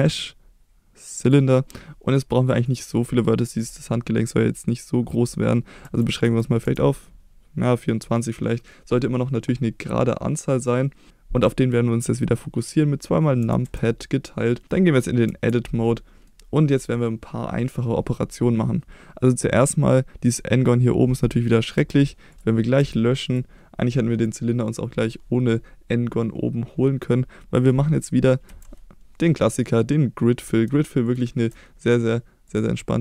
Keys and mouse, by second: 2.7-13.4 drag, 13.4 KP_Divide, 13.7 KP_Divide, 14.6-15.3 middle drag, 14.6 KP_1, 15.3 Tab, 15.8 middle click, 21.8 3, 22.8 x, 28.5 2, 32.6-33.0 drag.